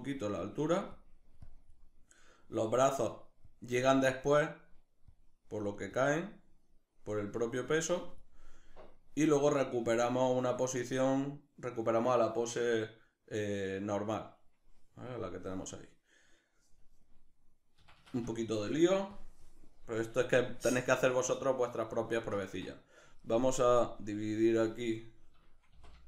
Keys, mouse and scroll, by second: 8.6-11.0 drag, 18.7 click, 19.6-23.5 shift+middle drag, 23.5-25.6 drag, 25.3 t, 25.6-26.0 shift+middle drag.